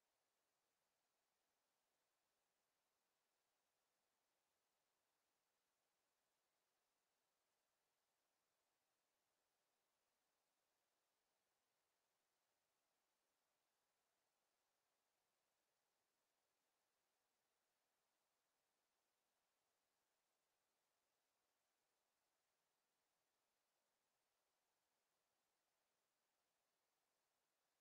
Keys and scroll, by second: 2.5 w, 14.3 Escape.